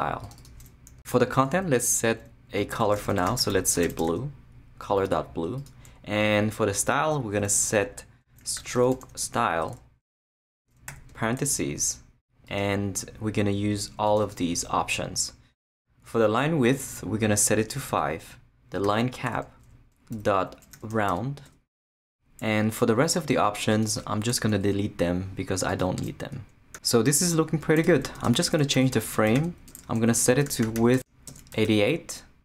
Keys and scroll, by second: 2.5-4.6 typing, 8.2-9.7 typing, 10.7 shift+Return, 10.9 shift+9, 17.9 5, 18.8 Tab, 20.1-21.4 typing, 21.4 Return, 24.6 shift+BackSpace, 27.8 Return, 28.1 Tab, 28.5-31.5 typing.